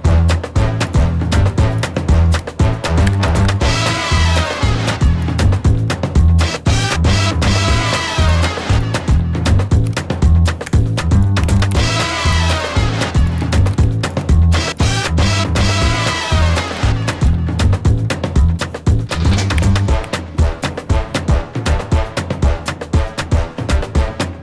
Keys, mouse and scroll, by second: 0.8 click, 1.7 click, 2.0 middle click, 2.2 g, 3.1 scroll down 1, 3.2 click, 3.4 KP_7, 3.9 scroll down 1, 4.2 shift+middle click, 5.7 middle click, 6.1-6.4 scroll up 2, 6.4 shift+middle click, 7.1 middle click, 7.7-8.1 scroll down 1, 8.1 middle click, 8.2 click, 8.7 click, 9.8 g, 11.1 alt+z, 11.1 alt+a, 11.1 shift+middle click, 11.1 scroll down 2, 11.1 b, 11.4 alt+a, 11.6 b, 12.2 g, 13.4 scroll down 1, 13.5 Tab, 13.5 shift+middle click, 13.5 scroll up 2, 13.6 shift+s, 14.2 Tab, 14.7 click, 15.8 shift+middle click, 15.8 scroll down 1, 16.1 click, 16.6 g.